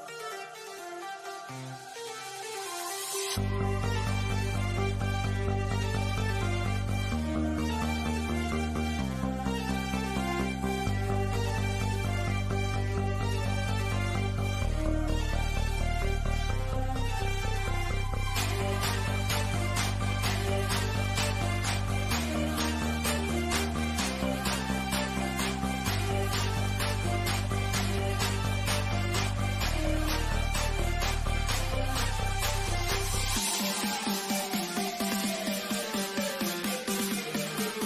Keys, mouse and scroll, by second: 4.5 click, 8.6 click, 14.1 click, 17.5-19.7 scroll down 1, 21.6 middle click, 22.4-22.8 scroll down 1, 25.7 scroll down 1, 29.6-32.4 middle drag, 33.8 scroll up 1, 37.7 scroll down 1.